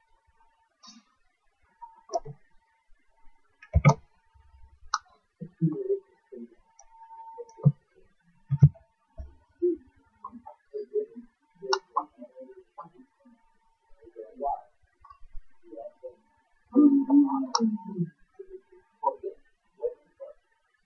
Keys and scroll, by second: 3.8 shift+q, 6.3 shift+q, 8.5 shift+h.